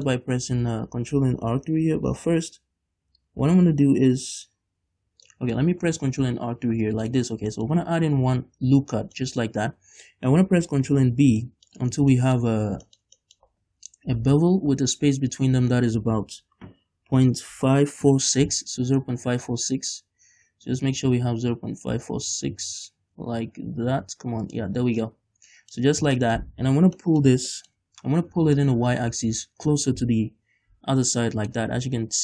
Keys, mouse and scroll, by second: 0.1-5.6 drag, 6.4 ctrl+r, 7.2 right click, 7.6-11.8 shift+middle drag, 7.8-9.5 drag, 7.8-9.3 scroll up 2, 12.4-13.4 middle drag, 12.6-13.0 scroll up 2, 14.3 ctrl+b, 24.7 shift+click, 24.9 scroll down 2, 25.2 middle click, 25.8-28.7 middle drag, 25.9-26.3 scroll up 2, 28.7-32.0 drag, 32.0 scroll up 2.